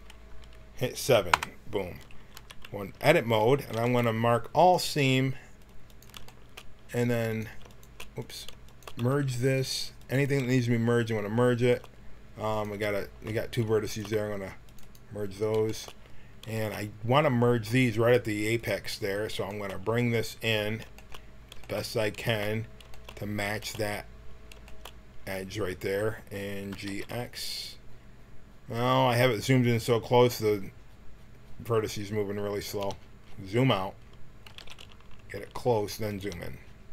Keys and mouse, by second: 1.3 KP_7, 2.3 Tab, 2.9 a, 3.6 ctrl+e, 5.8 click, 8.9 w, 14.1 w, 15.2-16.5 drag, 17.3-18.5 middle drag, 18.5-20.5 drag, 20.5 middle click, 26.7 g, 34.4 g.